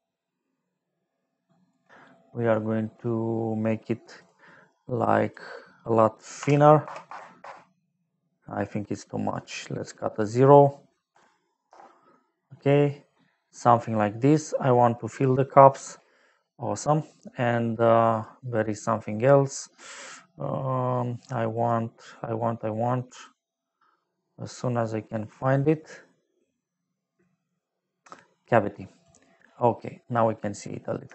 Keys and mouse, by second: 4.1 click, 5.2 click, 6.3 Left, 6.8 KP_0, 7.0 KP_0, 7.4 Return, 9.2 click, 10.1 click, 11.1 Delete, 11.6 Return, 15.1 click, 18.1 click, 21.1 click, 21.5 click, 23.0 click, 27.1 click, 28.9 click, 29.7 middle click, 31.0 shift+middle click.